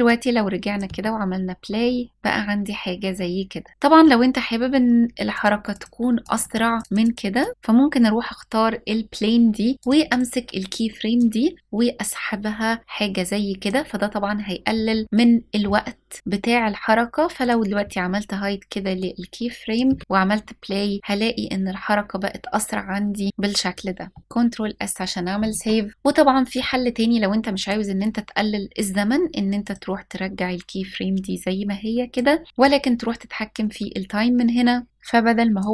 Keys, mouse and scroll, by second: 0.5 space, 5.0 click, 5.4 click, 5.9 click, 6.1 click, 6.4 click, 7.0 click, 9.7 click, 10.8 click, 17.1 click, 18.7-19.4 drag, 19.5 space, 23.8-24.2 middle drag, 24.2 ctrl+s, 25.9 click, 27.2 click, 29.3 click, 29.7 click, 34.9 click.